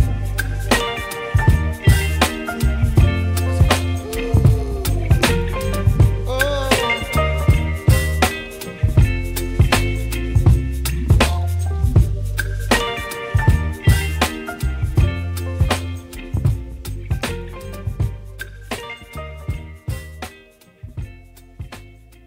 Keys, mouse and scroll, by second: 2.6-5.6 drag, 9.9-11.9 drag, 10.0 right click, 10.4 right click, 14.1 click, 15.8 shift+a, 17.4 p, 21.6 middle click.